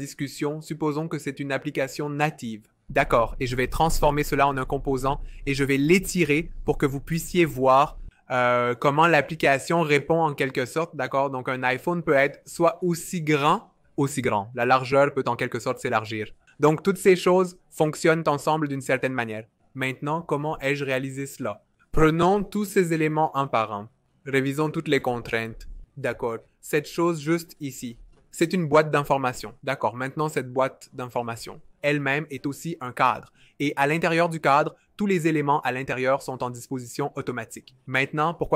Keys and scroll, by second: 6.7 v, 24.0 Return, 31.8 v.